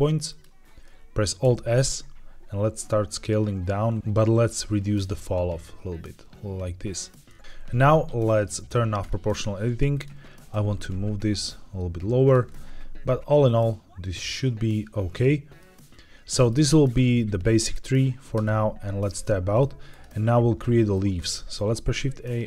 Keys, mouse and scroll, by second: 0.2 shift+click, 1.3 alt+s, 3.6-4.0 scroll up 3, 4.0-4.4 scroll down 3, 6.8 click, 7.4 Escape, 7.4 click, 7.4 g, 8.9 click, 9.8 click, 10.4 g, 12.2 click, 12.4-15.5 middle drag, 15.7-16.1 scroll down 2, 16.2 middle click, 18.3 Tab, 19.2-19.5 middle drag, 19.8 click, 20.5-20.8 shift+middle drag, 21.1 middle drag, 21.4 shift+a.